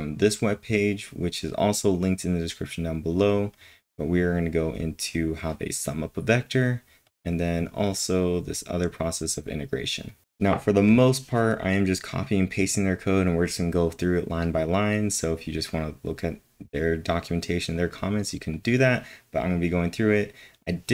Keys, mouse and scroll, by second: 0.4 scroll down 3, 0.5 scroll up 1, 0.6-1.1 scroll down 2, 3.1-4.1 scroll down 3, 4.7 scroll down 1, 5.8 scroll down 10, 6.2-6.9 typing, 6.7-7.5 scroll down 9, 7.7-8.3 scroll down 7, 8.6-9.1 scroll down 8, 9.5-10.3 typing, 10.0-11.4 scroll up 9, 11.4 scroll up 1, 17.7 scroll up 1, 17.7 click, 18.5 click.